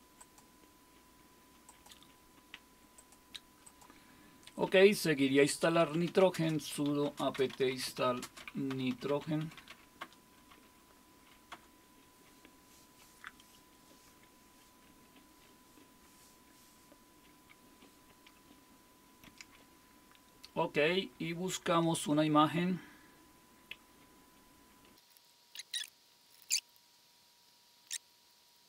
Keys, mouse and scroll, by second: 0.2-2.3 drag, 3.0-4.3 drag, 5.6-10.2 typing, 11.3-12.0 typing, 21.8 super+5, 24.9-26.8 typing, 25.5 click, 26.2 click, 26.7 click, 27.1-27.9 scroll down 2, 27.9 click, 28.1 right click, 28.3 click.